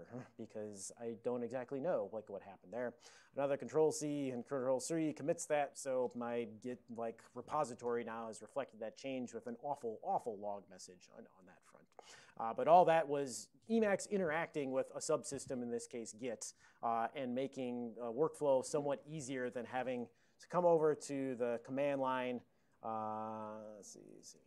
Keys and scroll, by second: 0.0-0.8 typing, 3.6 ctrl+c, 4.4 ctrl+c.